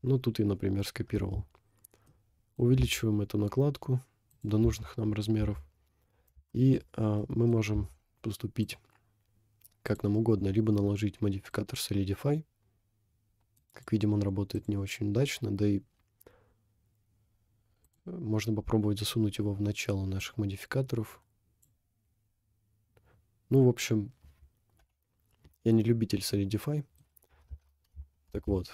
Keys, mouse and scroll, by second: 0.0-0.4 scroll up 1, 0.4 scroll down 1, 1.2 Tab, 1.8 scroll down 1, 2.1 middle click, 3.0 s, 4.7 Tab, 5.4 Tab, 6.6 shift+middle click, 6.8 scroll up 2, 7.2 middle click, 7.8 Tab, 8.6-10.0 drag, 10.3-11.0 scroll down 5, 11.5 click, 12.1 click, 12.7 click, 13.1 click, 14.5 click, 15.9 scroll down 1, 16.1-17.6 scroll up 3, 17.9-19.1 drag, 19.3-20.2 scroll down 3, 20.2-21.6 drag, 24.9 Delete, 26.3 middle click, 27.5 shift+`.